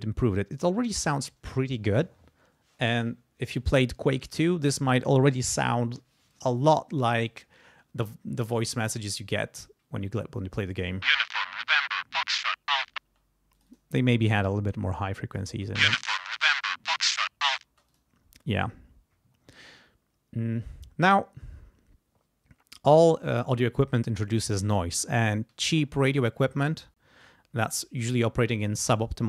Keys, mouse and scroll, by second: 10.8 space, 13.0 space, 13.5 click, 14.9 click, 15.5 space, 16.2 click, 17.7 space, 17.9 click.